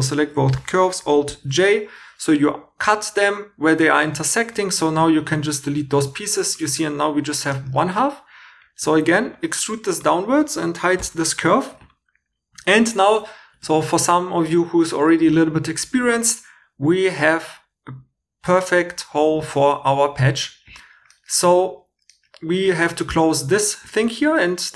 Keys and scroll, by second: 1.3 alt+j, 5.6 x, 8.8 e, 11.0 h, 24.4 2.